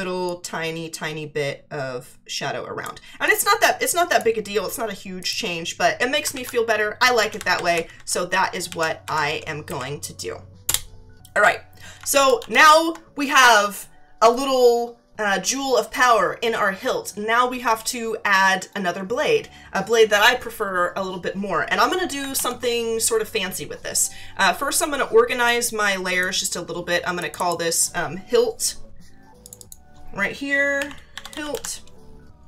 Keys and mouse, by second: 0.2 click, 3.2 click, 5.2 click, 6.3 ctrl+t, 7.2 Down, 8.6 Left, 9.6 Right, 10.6 Return, 10.6 KP_Enter, 25.4 click, 27.2 click, 29.4 click, 30.5-32.0 typing.